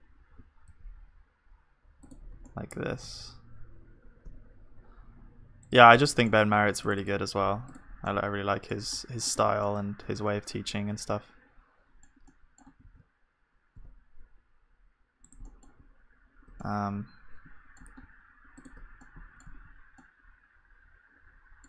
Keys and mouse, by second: 0.3 r, 2.5-6.1 middle drag, 10.6 click, 10.6-21.6 middle drag, 12.8 g, 19.0-21.3 drag, 19.5 z.